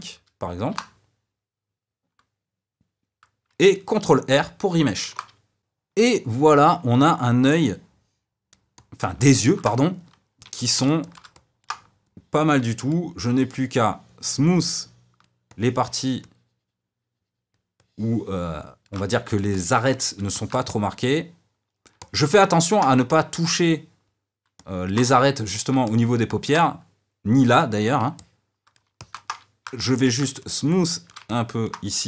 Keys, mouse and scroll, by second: 1.1 KP_0, 5.6-8.4 middle drag, 8.7-10.4 middle drag, 10.4 f, 11.0 shift+click, 11.3 middle click, 12.0-19.1 shift+drag, 19.1-29.8 middle drag, 29.8 f, 30.3 shift+click, 31.2 middle click.